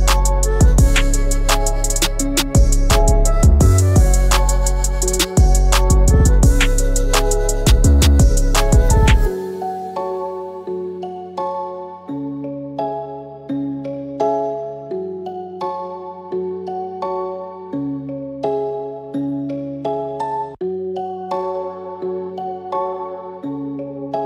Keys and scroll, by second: 4.7 ctrl+x, 7.1 ctrl+f.